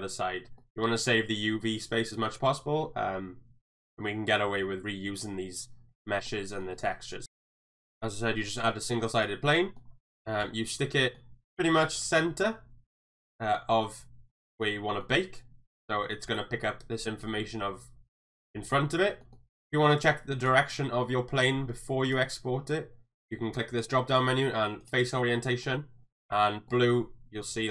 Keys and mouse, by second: 0.6 middle click, 6.3-6.6 middle drag, 6.8 shift+middle drag, 7.2 ctrl+z, 7.2 middle click, 7.5 shift+middle drag, 8.1-8.4 middle drag, 9.5 middle drag, 10.4 KP_3, 11.0 shift+middle click, 11.6 shift+middle click, 14.3-14.6 middle drag, 15.0 shift+middle drag, 19.1 shift+middle drag, 19.3 middle click, 22.2-25.1 drag, 25.5 shift+middle drag, 25.7-26.3 middle drag, 26.7 middle drag.